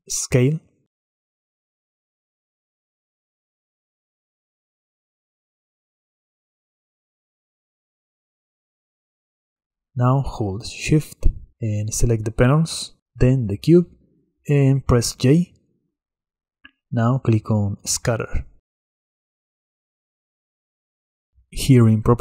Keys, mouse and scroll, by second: 1.6-4.8 drag, 9.6 click, 10.3 drag, 10.7 shift+drag, 11.0 shift+drag, 11.4 shift+drag, 11.7 shift+click, 13.5 shift+click, 16.6 j.